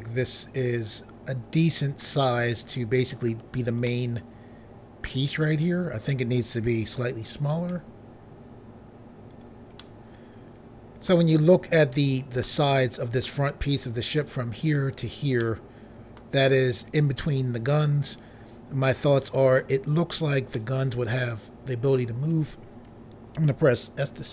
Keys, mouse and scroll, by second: 3.9 middle click, 7.7 s, 9.3 click, 9.8 middle click, 12.5 middle click, 15.4 middle click, 17.2 middle click, 20.6 middle click, 24.0 s.